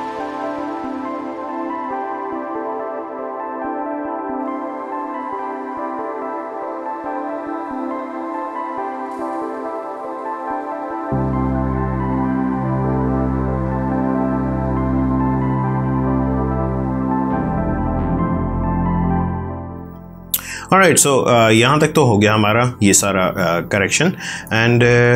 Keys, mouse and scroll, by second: 0.2 click, 0.7 click, 1.4 space, 1.8 click, 2.7 space, 2.9 click, 3.2 space, 3.4 click, 3.9 space, 4.2 click, 6.0 space, 6.2 click, 6.4 space, 7.0 ctrl+click, 8.2 click, 8.4 space, 8.8 click, 9.1 space, 9.3 click, 9.8 space, 10.2 click, 10.4 space, 10.7 click, 12.4 space, 12.7 click, 12.8 space, 13.2 ctrl+click, 14.6 space, 14.7 click, 15.4 ctrl+space, 15.5 ctrl+click, 16.6 click, 16.9 space, 17.0 click, 18.0 space, 19.3 click.